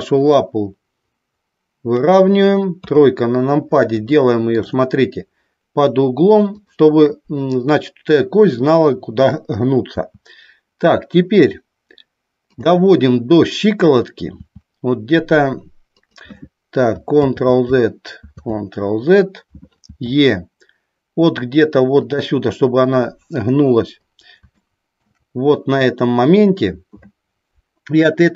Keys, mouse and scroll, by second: 0.3-1.8 drag, 2.7 KP_3, 4.1 shift+middle click, 15.9 click, 17.1 ctrl+z, 18.1 ctrl+z, 20.0 e, 22.0 click, 24.5 shift+middle click.